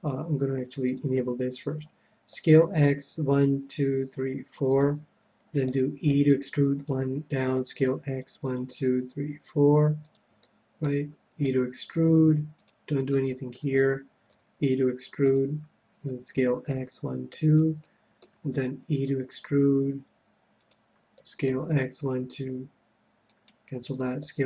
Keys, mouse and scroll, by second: 0.8-2.6 drag, 2.3 s, 4.7-6.7 drag, 5.7 e, 6.8-8.7 drag, 7.6 s, 10.1-11.9 drag, 10.4-12.2 middle drag, 11.4 e, 12.6-14.3 drag, 13.2-14.8 middle drag, 14.3 e, 15.3-17.1 drag, 16.1 s, 17.5-19.4 drag, 17.8-19.6 middle drag, 19.0 e, 20.6-22.6 drag, 21.1 s, 23.4-24.4 right drag, 24.2 s.